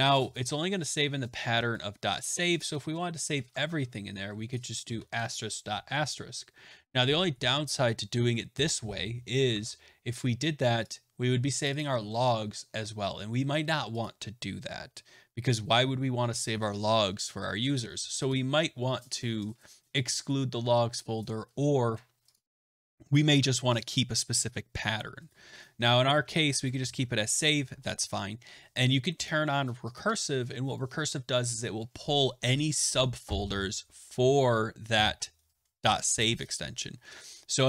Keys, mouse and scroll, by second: 0.8 click, 1.7 click, 2.1 click, 3.2 BackSpace, 3.4 BackSpace, 3.5 BackSpace, 4.8 *, 9.4 alt+Tab, 10.8 click, 11.6 click, 11.7 click, 13.9 click, 18.2 click, 22.2 click, 22.8 click, 23.7 click, 25.7-27.3 typing, 29.2 click, 29.9 click, 31.8 BackSpace.